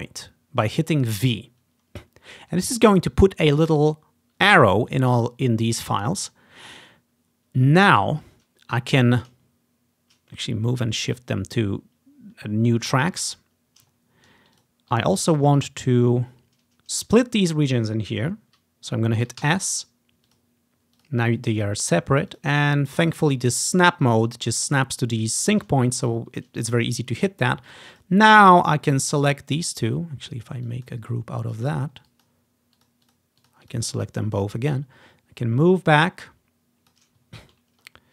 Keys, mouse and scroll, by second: 5.1-5.6 ctrl+scroll down 2, 6.6-6.9 scroll down 1, 10.4-12.0 middle drag, 12.6-13.7 scroll down 2, 13.3 click, 13.7-14.9 scroll up 2, 14.7 click, 14.9-16.0 ctrl+drag, 19.5 s, 20.4 click, 21.7 click, 22.4 click, 22.8 click, 25.9-27.2 ctrl+scroll down 1, 27.8 click, 28.1 click, 29.5 scroll down 2, 30.0 scroll up 2, 30.8-32.4 drag, 32.9 click, 33.2 click, 33.5 click, 33.8 click, 34.9-37.1 drag, 37.3 ctrl+click, 37.5-38.1 ctrl+scroll up 1.